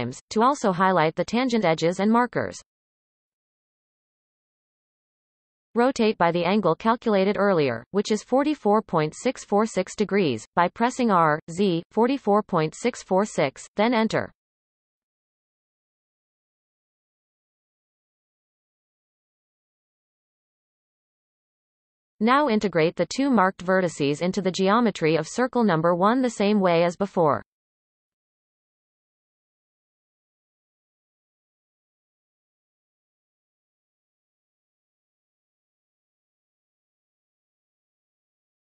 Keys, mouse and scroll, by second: 1.2 alt+shift+click, 1.7 alt+shift+click, 3.2-4.5 ctrl+KP_Add, 7.7 shift+middle click, 8.0 r, 14.1 r, 23.7-24.2 scroll up 1, 24.2 shift+middle click, 24.7-25.7 scroll up 9, 25.7 shift+middle click, 26.9 click, 28.1-29.1 shift+drag, 29.5 x, 32.1 click, 32.4 shift+click, 33.1 shift+click, 33.5 shift+click, 34.4 f, 35.0 click, 35.4 shift+click, 36.2 f, 36.5-37.5 scroll down 9, 37.5 shift+middle click, 37.9-38.4 scroll up 1, 38.4 shift+middle click.